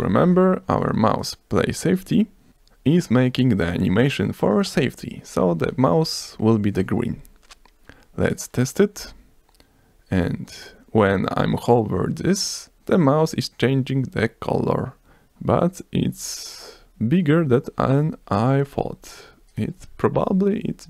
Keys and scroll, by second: 0.3 BackSpace, 2.2 ctrl+s, 2.5 F12, 9.4 F5.